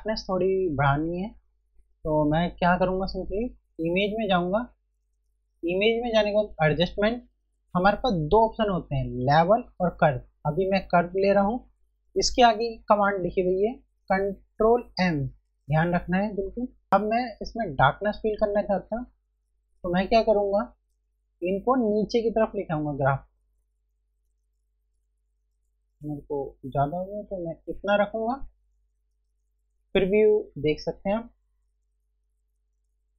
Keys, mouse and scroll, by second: 3.7 F1, 4.4 click, 16.9 click, 21.9 click, 30.8 click.